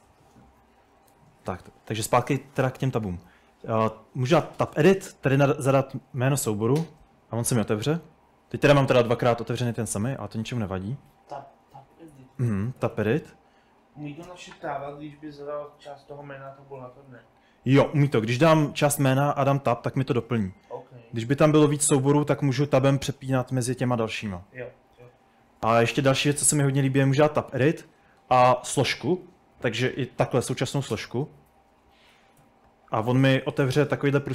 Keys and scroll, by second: 4.6 BackSpace, 4.7 BackSpace, 5.8-7.1 typing, 10.6-13.3 typing, 18.0 m, 19.3 Tab, 24.5 Tab, 26.0-26.9 typing, 29.6-29.9 typing, 31.0 Return, 32.4-34.3 typing, 33.3 Escape.